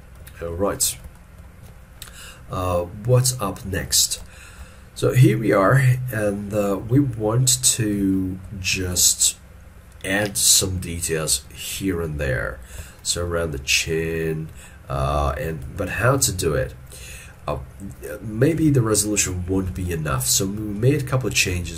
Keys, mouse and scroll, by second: 0.4 shift+middle click, 1.2 shift+middle click, 4.4 shift+middle click, 13.1 shift+middle click, 15.9 shift+middle click, 18.7 alt+e, 19.8 alt+e, 20.4 shift+middle click.